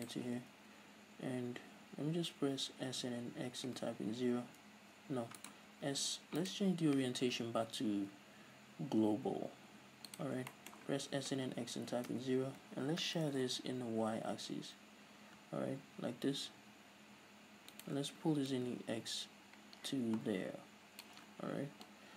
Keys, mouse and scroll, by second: 0.5 ctrl+right click, 3.0 s, 5.7 right click, 5.8 s, 6.6-7.3 right drag, 7.5 ,, 10.6-17.5 shift+middle drag, 11.0 s, 12.7 Return, 13.3 ctrl+alt+shift+s, 17.9 shift+click, 19.8-22.1 drag.